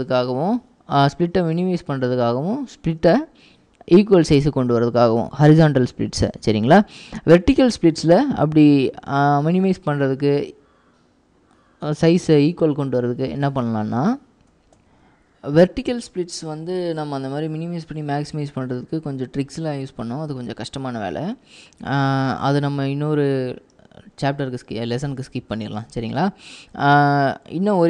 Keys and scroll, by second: 14.8 ctrl+alt+p, 19.5 typing.